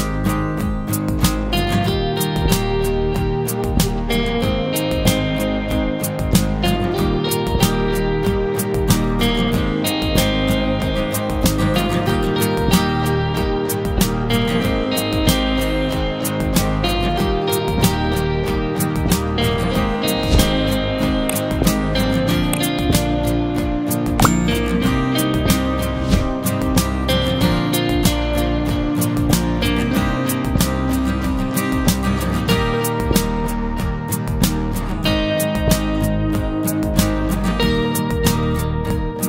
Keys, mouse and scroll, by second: 0.1-0.5 scroll down 2, 0.5-1.6 middle drag, 1.6-3.0 scroll up 2, 3.0 click, 5.5 Delete, 6.2-7.3 shift+middle drag, 7.3 KP_1, 8.1 scroll up 1, 8.3 shift+middle click, 8.7 shift+scroll up 1, 8.9 scroll down 2, 9.3-13.2 shift+middle drag, 13.2-13.6 scroll up 1, 13.6 KP_Divide, 14.8-15.3 scroll up 3, 15.3 shift+middle click, 15.8-16.5 scroll up 1, 16.5 k, 22.4 alt+a, 26.3 click, 28.1 click, 31.4 alt+a, 31.7 scroll down 1, 32.0-33.2 middle drag, 33.2 scroll up 1, 33.4 shift+middle click, 34.0-34.8 scroll up 1, 34.8 click, 35.1-37.4 middle drag, 37.4 shift+click, 38.2 shift+click.